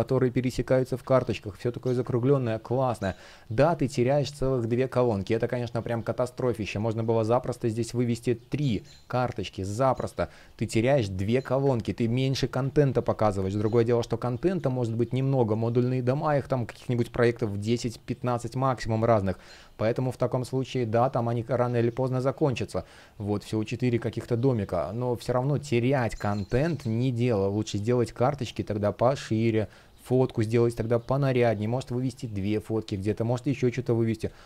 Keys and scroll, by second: 0.8 super+z, 2.3 space, 6.4 super+z, 9.9 super+z, 10.8 super+z, 11.5 super+z, 12.6 super+z, 13.1 space, 19.3 space, 32.6 super+z, 34.2 super+z.